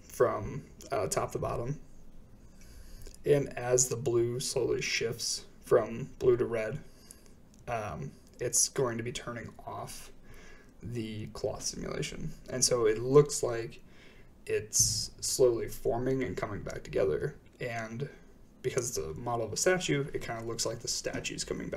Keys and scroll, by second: 0.0 Return, 0.0 space, 3.1 space, 4.3-5.1 typing, 7.2-7.6 typing, 7.7 Return, 14.1 space, 20.6 space.